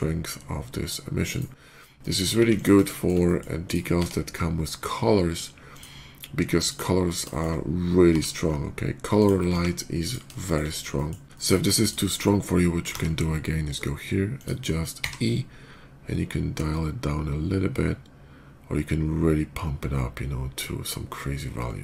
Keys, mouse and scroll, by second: 1.1 right click, 1.4 middle click, 1.8 middle click, 2.2 x, 2.4 click, 2.8 middle click, 2.8 shift+x, 3.1 middle click, 3.5 click, 3.8 d, 5.6 click, 6.5 click, 7.1 shift+middle click, 7.9 g, 9.0 ctrl+g, 9.0 click, 9.3 s, 9.9 click, 10.3 shift+middle click, 10.8 shift+middle click, 11.2 shift+middle click, 11.7 click, 12.7 d, 14.2 click, 14.8 e.